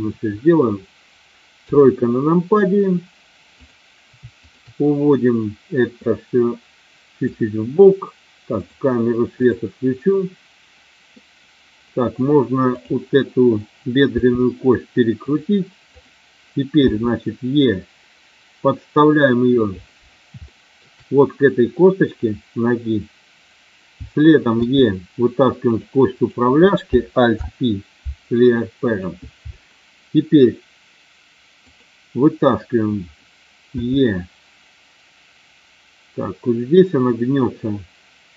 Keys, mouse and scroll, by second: 1.6 KP_3, 3.6 click, 4.3 shift+click, 5.9-7.2 drag, 8.5 click, 9.3 click, 14.2 r, 15.2 click, 15.8 click, 16.8 e, 19.5 click, 20.3 shift+middle click, 24.6 e, 25.6 click, 26.1 click, 27.2 alt+p, 33.7 e.